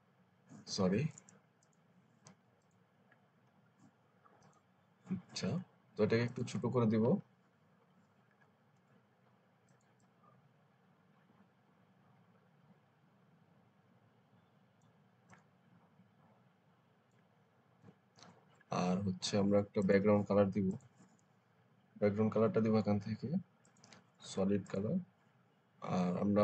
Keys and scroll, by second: 6.9 ctrl+t, 17.7 Return.